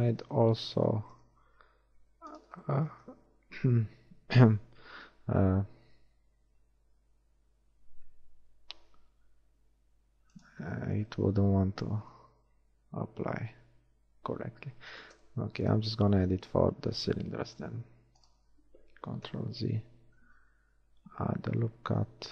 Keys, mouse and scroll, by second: 1.7 ctrl+r, 3.4 ctrl+r, 12.7 ctrl+shift+r, 16.4 ctrl+shift+r, 19.1 ctrl+z, 20.4 ctrl+r.